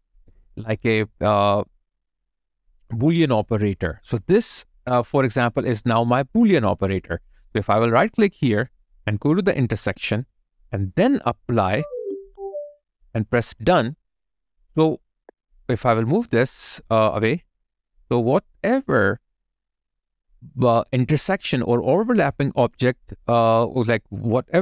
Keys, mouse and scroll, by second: 2.6 right click, 7.8 right click, 15.0 double click.